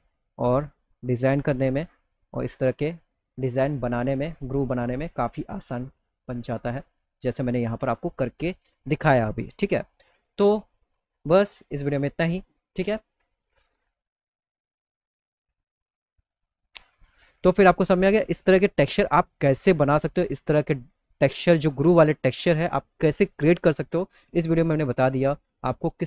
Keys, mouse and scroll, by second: 0.1-1.6 drag, 3.0 middle click, 4.0 middle click, 4.6 middle click, 5.1 middle click, 5.5 middle click, 6.2 middle click, 10.9 middle click, 11.2 middle click, 16.0 click, 16.9 middle click, 17.4 click, 18.1 middle click, 18.3 middle click, 18.6 click, 19.9 click, 20.3 click, 24.6 click.